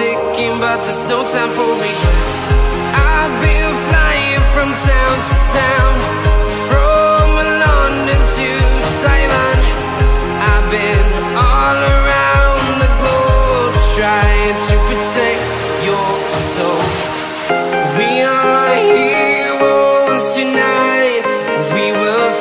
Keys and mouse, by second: 0.3 click, 2.5 click, 3.6-4.6 drag, 6.6-8.6 drag, 9.6 click, 9.7 middle click, 10.5 click, 10.9 KP_0, 11.3-13.5 middle drag, 13.5 click, 14.5-16.4 drag, 16.7-18.8 drag, 19.0 ctrl+z.